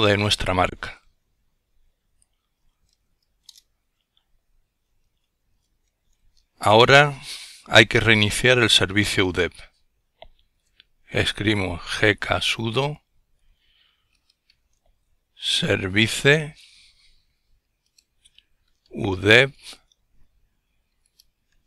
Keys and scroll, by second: 1.8 typing, 2.7 Return, 4.8 ctrl+l, 9.8 typing, 11.0-16.2 typing, 17.5-19.0 typing, 20.4-21.6 typing.